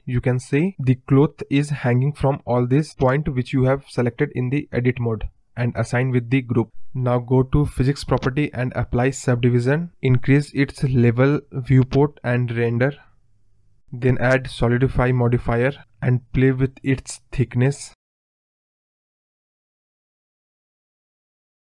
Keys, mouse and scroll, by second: 1.1 scroll down 2, 1.2-3.8 middle drag, 3.8 space, 4.9 click, 6.8 click, 7.6 scroll up 1, 7.7-8.3 middle drag, 9.4-11.7 drag, 12.6-13.2 scroll down 1, 13.2 ctrl+z, 13.9-14.7 drag, 17.1-17.8 scroll down 1, 17.8 scroll down 1, 17.9 middle drag, 18.2 scroll up 2, 18.4 middle click, 18.8 click, 20.2 click, 21.7-21.8 scroll down 3.